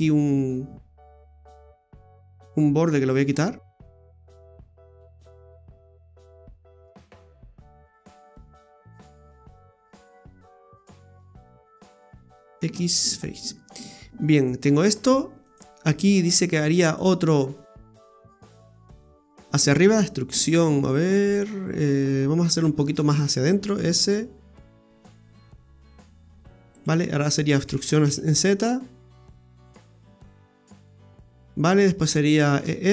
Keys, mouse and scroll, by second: 1.8 right click, 3.9 ctrl+c, 4.5 ctrl+v, 5.5 right click, 6.1 right click, 6.5 ctrl+v, 6.8 ctrl+right click, 8.3 right click, 10.4 alt+shift+right click, 11.1 right click, 11.4 alt+shift+right click, 11.6 right click, 12.5 x, 13.5 scroll down 2, 13.8 middle click, 15.4 right click, 16.9 click, 18.4 right click, 18.8 alt+shift+right click, 18.9 right click, 19.4 middle click, 22.9 shift+s, 24.6 s, 27.7 e, 28.3 e, 31.5 middle click, 32.6 shift+s.